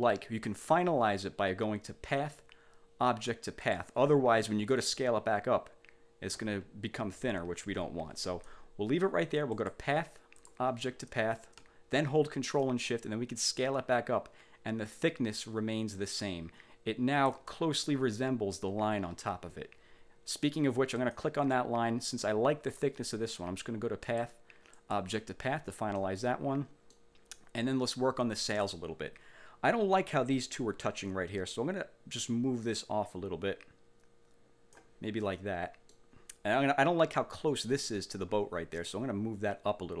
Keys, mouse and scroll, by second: 2.2 click, 3.7 click, 5.0-6.6 ctrl+shift+drag, 7.8 ctrl+z, 9.7 click, 10.5 click, 12.8-17.6 ctrl+shift+drag, 21.1 click, 24.2 click, 24.9 click, 26.1-27.2 middle drag, 28.6 click, 32.2-35.1 drag, 35.4 middle click, 39.0-40.0 drag.